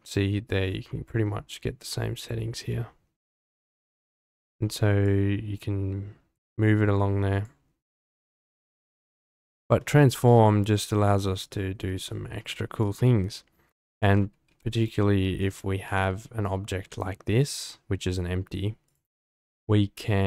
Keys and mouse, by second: 4.3 middle drag, 5.0-7.6 drag, 8.3-9.3 drag, 9.8-10.8 middle drag, 11.5 shift+middle drag, 13.9 click, 14.4 g, 14.7 y, 15.4-15.8 drag, 15.8 g, 15.9 x, 17.4 click, 18.9 click.